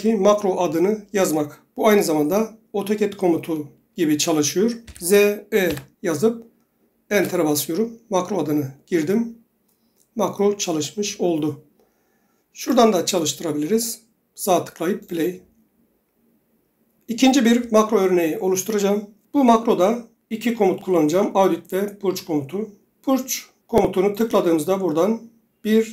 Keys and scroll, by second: 5.0-6.3 typing, 7.3 Return.